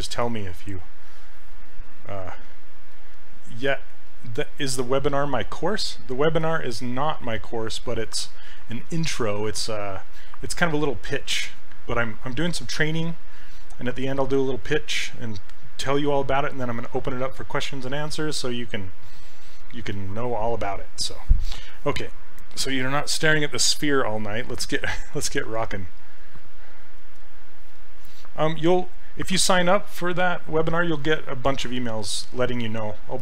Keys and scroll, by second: 3.6 s.